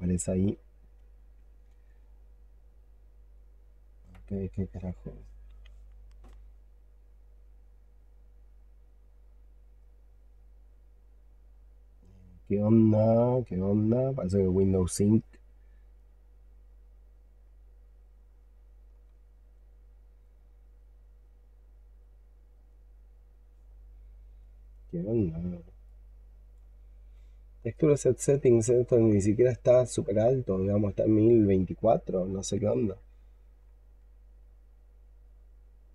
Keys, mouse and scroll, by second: 0.0 double click, 0.2 double click, 0.4 double click, 0.6 double click, 0.7 double click, 1.0 double click, 1.2 double click, 1.6 double click, 1.9 double click, 2.0 double click, 2.2 double click, 2.5 double click, 7.2 double click, 7.5 double click, 7.9 double click, 9.7 alt+click, 12.3 alt+click, 14.6 alt+click, 21.0 double click, 21.4 double click, 21.8 double click, 22.2 double click, 22.6 double click, 25.7 alt+click, 28.5-32.9 scroll up 11, 33.1 alt+click.